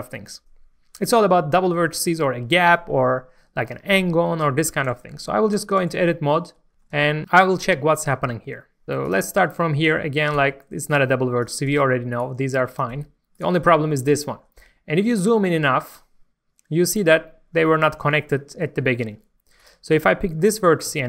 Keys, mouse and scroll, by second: 5.6 Tab, 6.1 middle click, 6.7 scroll down 1, 6.9 middle click, 7.4-7.8 scroll up 1, 8.6 shift+middle click, 8.8 scroll down 1, 9.0 click, 9.5 shift+middle click, 10.3 g, 10.9 right click, 11.4 click, 11.7 g, 12.1 right click, 12.7 click, 12.9 g, 13.3 right click, 14.4 scroll up 1, 15.0 shift+middle click, 19.5 click, 20.0 scroll down 1, 20.9 g.